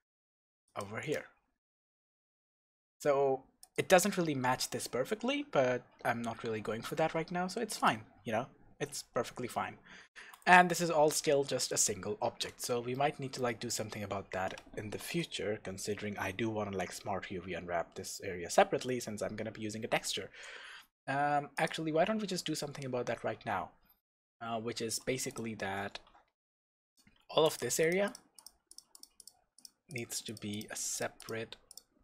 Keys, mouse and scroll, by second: 0.8 click, 1.2 Tab, 1.7-2.1 scroll up 1, 2.1 scroll down 1, 3.6 click, 5.6-6.6 scroll down 1, 6.7 scroll up 1, 7.8 click, 8.3-10.1 scroll down 1, 10.1 shift+z, 12.9-13.8 middle drag, 13.5-13.8 scroll down 2, 13.9-14.4 scroll up 1, 15.0 KP_0, 15.6-16.1 scroll up 2, 16.1-21.5 middle drag, 16.1-16.7 scroll down 2, 16.7-19.7 scroll down 1, 19.7-20.3 scroll down 1, 20.6 Tab, 21.5 click, 22.0 Tab, 22.6-25.3 scroll up 2, 25.3 click, 26.9 click, 27.5 click, 27.8 shift+click, 28.1 shift+click, 28.4 shift+click, 28.7 shift+click, 28.9 shift+click, 29.2 shift+click, 29.6 shift+click, 29.9 shift+click, 30.3 shift+click, 30.5 shift+click, 30.9 shift+click, 31.2 shift+click, 31.7 shift+click.